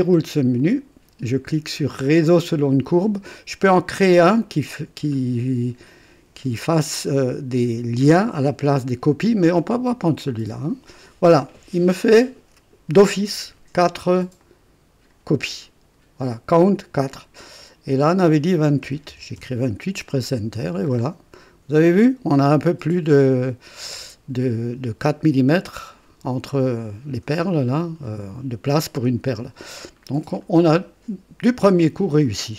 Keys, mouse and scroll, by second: 0.6 click, 10.2 click, 14.4-15.3 drag, 17.5 click, 18.8 KP_2, 19.1 KP_8, 19.3 KP_Enter, 20.9-21.2 scroll up 1, 29.9-30.3 scroll down 1.